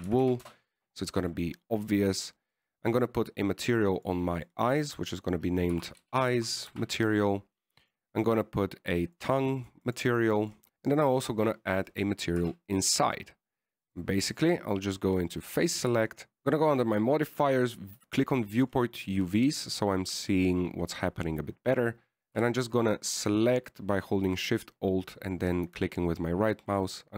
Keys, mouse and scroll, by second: 1.4 o, 3.8 right click, 5.3 click, 5.7 click, 5.8 click, 9.2 right click, 10.3-10.7 click, 10.7 BackSpace, 13.2 right click, 13.7 Tab, 15.2 click, 16.3 middle click, 16.7 a, 17.7 click, 18.8 click, 20.7 middle click, 23.5 right click, 23.9 alt+shift+right click.